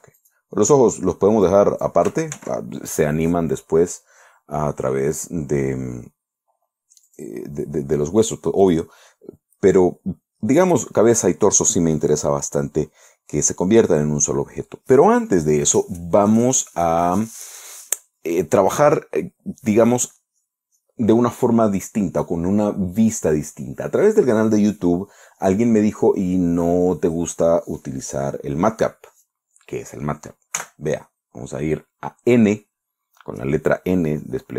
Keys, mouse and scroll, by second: 0.3 ctrl+z, 0.6 ctrl+right click, 1.9 click, 2.8 ctrl+z, 7.6 click, 9.1 click, 31.0 n.